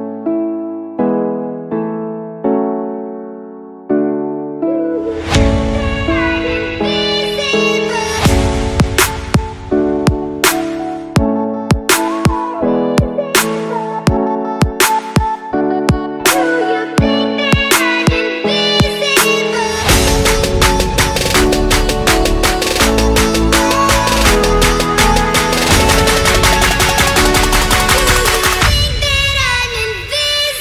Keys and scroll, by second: 0.0-0.3 typing, 2.4 alt+shift+super+e, 2.8 alt+shift+super+BackSpace, 3.4 shift+super+e, 5.0 super+j, 28.4 super+t, 29.0 Return.